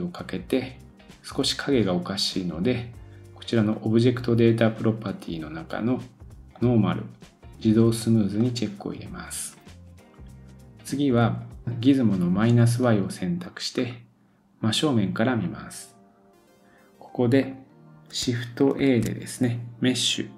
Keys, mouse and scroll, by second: 1.4-4.0 drag, 4.6-6.1 scroll down 2, 6.1-8.4 scroll down 8, 6.5-20.3 drag, 8.4 scroll down 1, 13.7-15.9 scroll up 2, 15.9-16.8 scroll up 2, 18.8 shift+a.